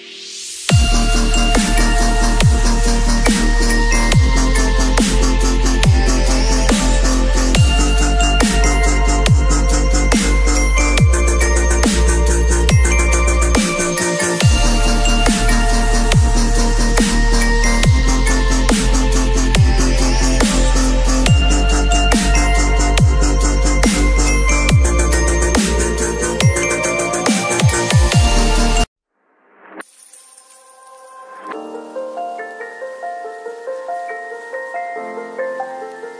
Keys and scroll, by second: 4.7 v, 14.7 ctrl+u, 21.2 space, 23.8 space.